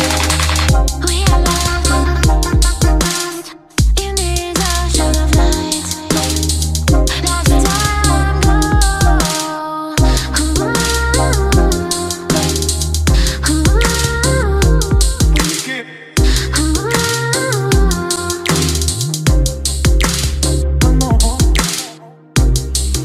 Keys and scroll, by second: 0.1 ctrl+g, 13.7 ctrl+d.